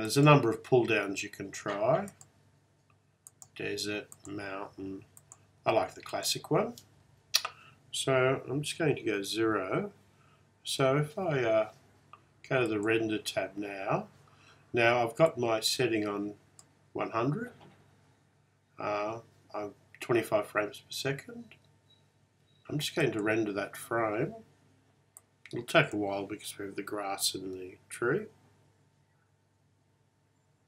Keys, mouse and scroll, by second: 0.1 click, 3.4 click, 5.3 click, 12.8-14.6 drag, 15.4 click, 23.1-30.2 drag, 25.7 typing.